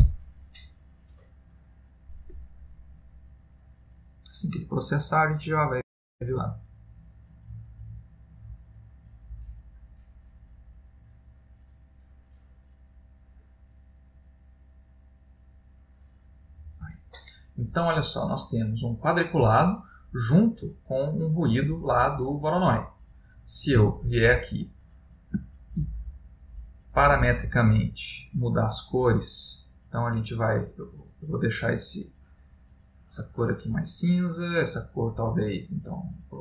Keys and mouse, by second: 18.5 middle click, 20.6 middle click, 24.1 middle click, 24.8 ctrl+middle click, 25.7 ctrl+middle click, 28.1 click, 34.7 click.